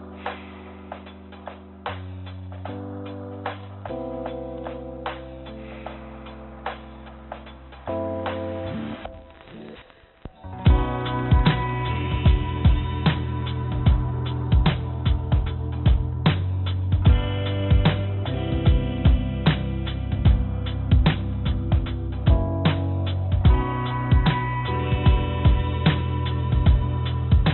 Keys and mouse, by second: 1.7 click, 8.8 click, 9.1 click, 9.6 click, 9.8 click, 10.4 click, 10.6 click, 11.5 click, 11.7 click, 12.3 click, 12.9 click, 14.5 click, 15.5 a, 16.7 click, 18.2 click, 18.4 click, 18.9 click, 22.3 h, 24.5 click, 25.6 click, 25.8 click, 26.8 click, 27.1 click.